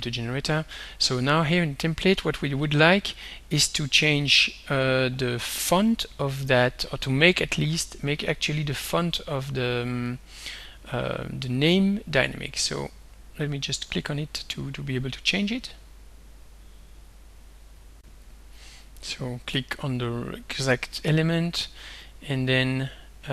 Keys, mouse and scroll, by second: 3.2 click, 4.2 click, 5.9 click, 7.0 click, 8.3 click, 10.1 click, 12.0 click, 13.0 click, 13.4 click, 14.1 click, 15.0 click, 15.4 click, 17.5 click, 18.0 click, 18.6 click, 19.0 click, 21.0 right click.